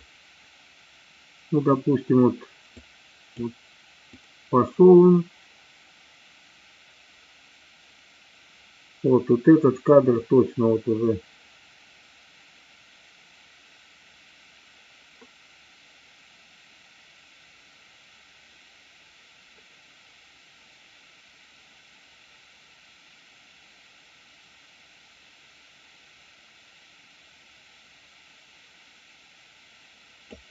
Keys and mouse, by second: 2.7 click, 4.2-30.4 drag.